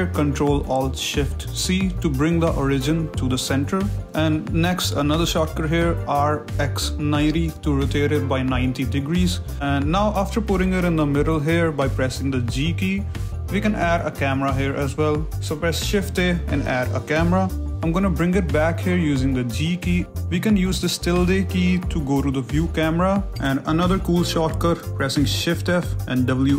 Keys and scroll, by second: 0.4 ctrl+alt+shift+c, 6.0 r, 6.6 x, 7.1 9, 7.8 Return, 8.6 g, 10.0 s, 10.4 g, 11.6 g, 12.7 shift+a, 17.4 g, 19.0 g, 23.9-26.5 typing.